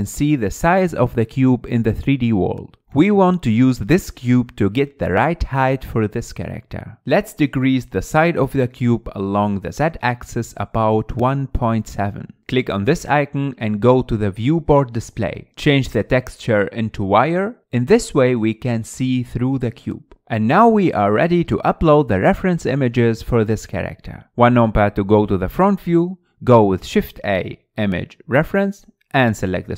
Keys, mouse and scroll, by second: 0.0 ctrl+a, 10.5-13.5 drag, 13.5 middle click, 15.2-15.7 drag, 15.7-16.4 scroll down 4, 16.4-18.4 drag, 18.9-20.5 middle drag, 20.5 KP_1, 21.2-22.3 scroll up 3, 22.3-22.7 scroll down 1, 22.7-24.1 middle drag, 24.1 KP_1, 26.2 shift+a.